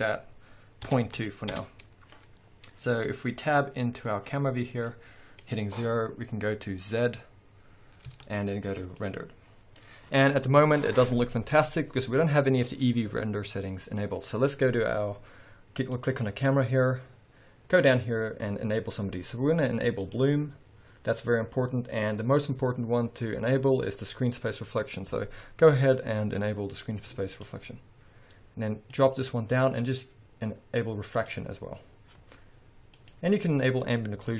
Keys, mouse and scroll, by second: 1.6 Return, 3.6 KP_0, 4.4-6.5 scroll up 2, 6.5-8.1 scroll up 1, 8.1 z, 20.2 click, 27.4 click, 29.0-31.4 drag, 33.0 click, 34.0 click.